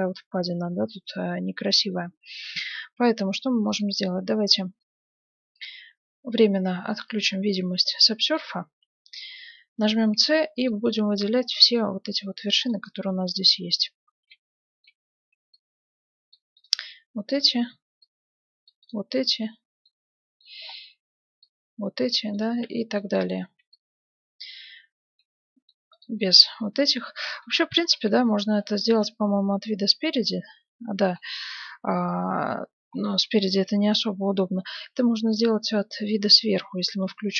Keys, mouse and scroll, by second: 3.6-6.4 drag, 6.8-8.5 drag, 7.7-9.5 middle drag, 9.7 c, 12.6-14.4 right drag, 13.3-14.8 middle drag, 15.3 c, 17.8-22.6 middle drag, 17.8 c, 20.9 c, 22.4-24.1 right drag, 22.7-24.5 middle drag, 23.4 c, 25.9-27.8 right drag, 26.1-28.2 middle drag, 27.4 KP_1, 28.6-30.8 middle drag, 28.7 z, 31.6-33.2 middle drag, 33.6 KP_7, 34.0 middle click, 36.6 z.